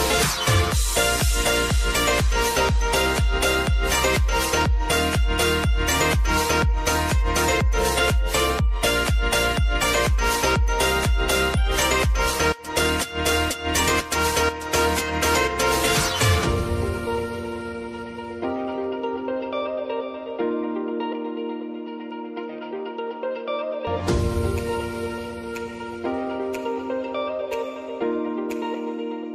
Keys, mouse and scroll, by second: 5.1 scroll down 1, 6.4 click, 8.0-8.5 alt+scroll up 1, 8.5 alt+scroll down 1, 12.4 click, 12.7 right click, 13.6-24.4 drag, 24.4 ctrl+z, 25.9 click, 28.3 ctrl+d, 29.0-29.3 drag.